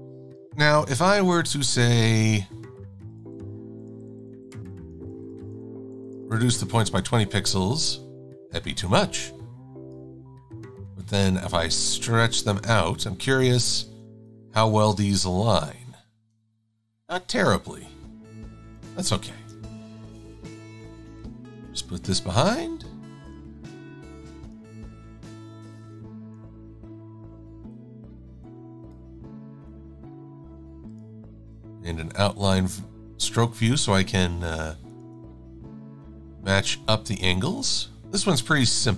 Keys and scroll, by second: 1.6 super+9, 2.8 Down, 3.9 Down, 4.1 Down, 4.4 Down, 4.6 Down, 4.8 Down, 5.0 Down, 5.2 Down, 5.4 Down, 5.6 Down, 6.2 Down, 6.5 Down, 7.1 Return, 19.5 d, 20.7 /, 22.3 a, 31.3 shift+x.